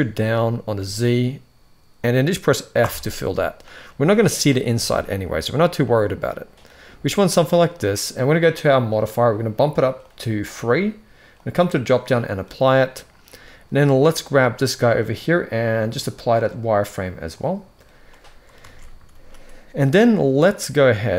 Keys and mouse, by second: 0.5 s, 2.7 f, 3.4 middle click, 4.7 Tab, 5.0 middle click, 5.6-6.3 middle drag, 9.7 click, 10.2 click, 11.2-11.7 drag, 12.6-13.0 middle drag, 15.7-17.1 drag, 17.8 middle click, 18.4 alt+a, 18.9 ctrl+s.